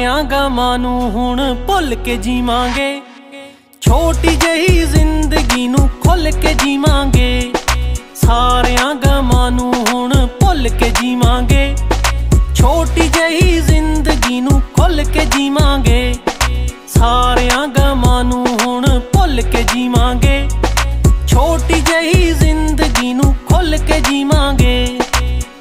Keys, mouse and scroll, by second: 0.8 ctrl+z, 2.5 click, 3.8 right click, 5.0 click, 6.2 right click, 7.9 click, 16.2 right click, 18.4 click, 20.5 shift+click.